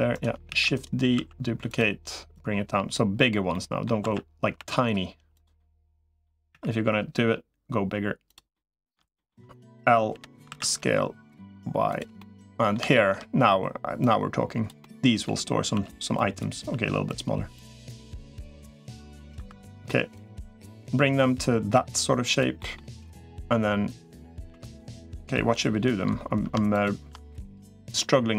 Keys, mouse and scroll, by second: 0.3 shift+d, 0.9 s, 2.3 click, 3.3 middle click, 3.9 s, 5.4 middle click, 6.3 e, 8.3 middle click, 9.9 l, 10.3 s, 12.0 middle click, 12.7 shift+middle click, 13.9 click, 14.6 middle click, 15.5 s, 16.5 s, 17.5 click, 18.1 middle click, 19.3 2, 19.9-21.5 drag, 22.1 click, 22.4 middle click, 22.9 middle click, 24.5 click, 24.5 3, 24.8 middle click, 26.5 shift+click, 27.8-28.3 middle drag.